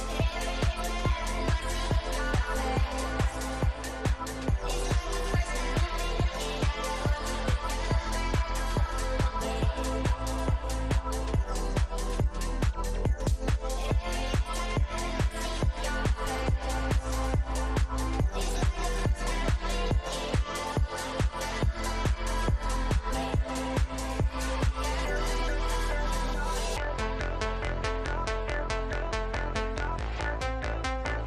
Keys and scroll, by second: 0.0 F2, 3.2 Delete, 4.5 F2, 11.2 ctrl+z, 12.1 space, 12.4 F3, 13.5 Escape, 13.8 F2, 17.8 space, 25.1 space, 27.2 ctrl+g, 28.4 space.